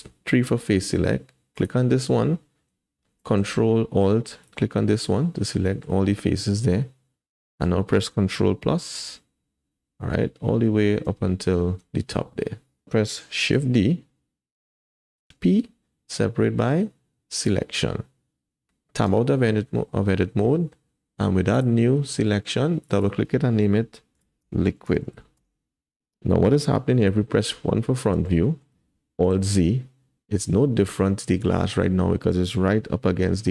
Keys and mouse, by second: 1.6 click, 5.6 click, 7.3 click, 7.3 middle click, 8.8 ctrl+KP_Add, 9.4 ctrl+KP_Add, 10.2 ctrl+KP_Add, 11.5 ctrl+KP_Add, 13.5 shift+d, 19.1 Tab, 21.5 click, 23.0-25.4 drag, 27.4 KP_1, 28.5 shift+middle click, 29.3 alt+z, 33.0 g.